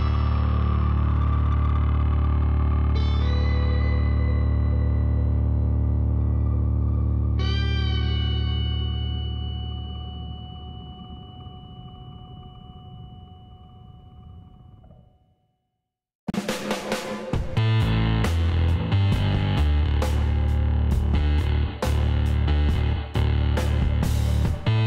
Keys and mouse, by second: 1.0-5.4 middle drag, 1.3 Tab, 6.3-9.0 middle drag, 6.5 Tab, 7.1 Tab, 7.5 Tab, 10.0-11.8 drag, 11.0 e, 12.9-15.0 drag, 14.7 e, 21.6-23.3 middle drag.